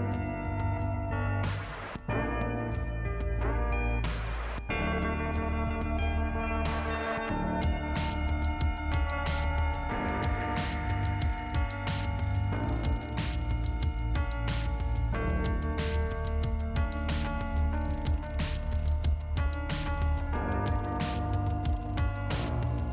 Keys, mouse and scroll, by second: 1.2 click, 2.0 click, 2.9 click, 3.2 click, 4.2 click, 4.3 click, 5.1 click, 5.2 click, 5.9 click, 6.0 click, 6.7 click, 6.8 click, 7.0 click, 8.1 click, 8.1 click, 8.5 click, 8.6 double click, 9.5 double click, 9.6 double click, 10.2-10.6 scroll down 2, 11.4 middle click, 12.4 scroll up 2, 12.8 middle click, 13.4-14.2 scroll up 1, 14.7 click, 14.8 click, 15.3 click, 15.4 click, 15.5 click, 15.6 click, 16.2 click, 17.2 click, 17.3 click, 19.3 click, 20.2 click, 20.3 click, 20.5 click, 21.7 click, 21.8 click, 22.5 click, 22.7 click.